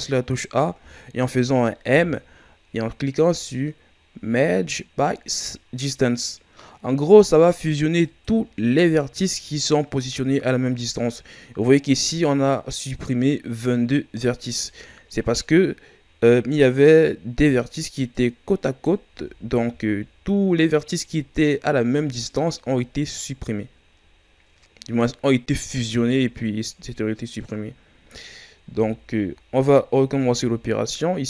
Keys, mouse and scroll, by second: 1.8 m, 14.7 ctrl+scroll up 1, 15.3-15.7 scroll up 3, 17.1 scroll up 2, 18.1-19.1 right drag, 19.1 ctrl+z, 19.7 scroll down 1, 22.9 ctrl+scroll down 2, 24.8-27.7 scroll down 1, 28.7 Tab, 29.1-29.7 scroll down 2, 29.7 scroll up 3, 30.0 Tab, 30.9 scroll down 2.